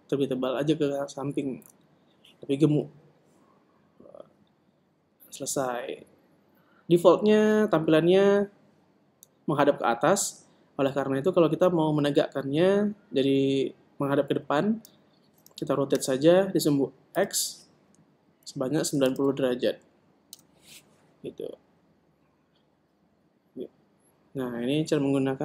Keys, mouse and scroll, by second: 0.4-9.1 middle drag, 9.1 KP_1, 17.2 r.